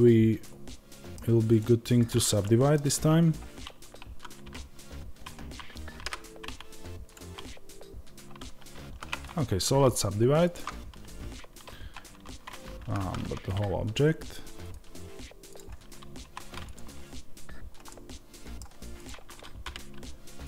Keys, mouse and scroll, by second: 1.4 click, 2.3-8.7 middle drag, 4.3 g, 8.7 ctrl+z, 9.1-16.5 right drag, 16.1 1, 16.5-17.8 drag, 17.8-18.8 middle drag, 18.8-20.4 drag.